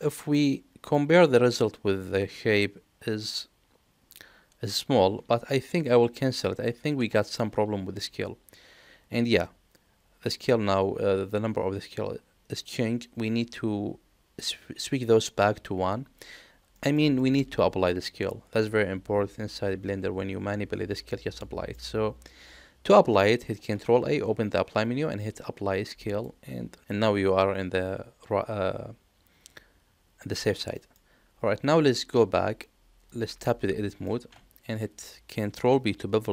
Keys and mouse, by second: 0.3 middle click, 2.1 middle click, 5.4 ctrl+z, 6.9 Tab, 16.7 middle click, 17.1 shift+middle drag, 17.8 middle click, 21.4 middle click, 23.6 ctrl+a, 30.7 middle click, 33.0 click, 33.8 middle click, 34.2 Tab.